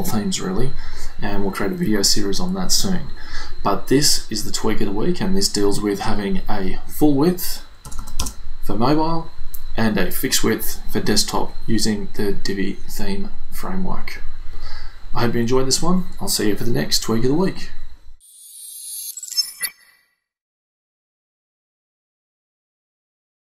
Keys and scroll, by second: 7.9 BackSpace, 8.0 0, 8.2 Return.